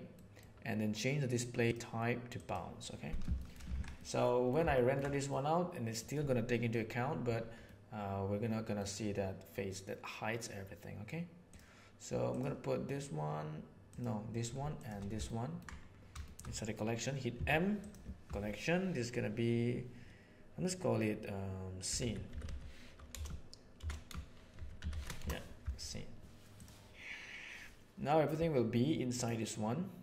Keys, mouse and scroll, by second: 0.2 middle click, 1.6-2.5 drag, 3.4 shift+middle click, 3.6 alt+a, 4.0-4.5 middle drag, 4.7 ctrl+middle click, 5.3 middle click, 5.4 middle click, 7.7-8.8 middle drag, 15.2-15.6 ctrl+middle drag, 16.2 shift+middle click, 17.4 m, 29.2 click.